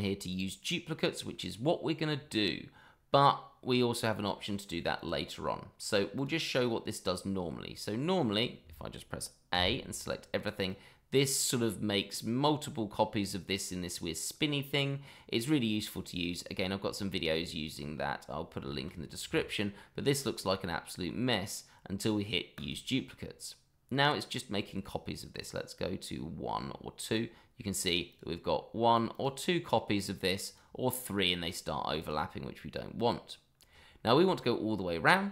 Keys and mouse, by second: 1.2-1.9 middle drag, 4.9 click, 6.1 click, 9.5 a, 10.7 click, 17.3-17.8 shift+middle drag, 18.7 shift+middle drag, 22.5 click, 24.6-27.1 drag, 28.1 click, 29.1 click, 30.4 click, 32.0 click.